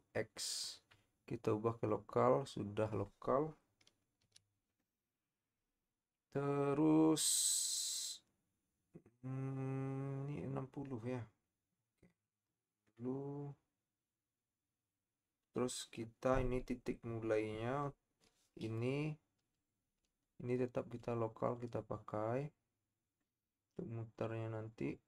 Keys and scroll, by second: 4.4 KP_7.